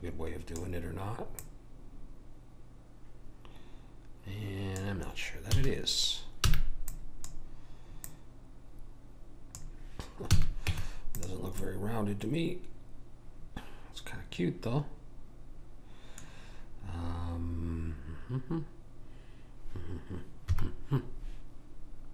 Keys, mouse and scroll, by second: 1.4 click, 5.5 a, 6.5 b, 8.0 click, 10.3 a, 10.7 Tab, 11.6-13.4 middle drag, 20.5 KP_1.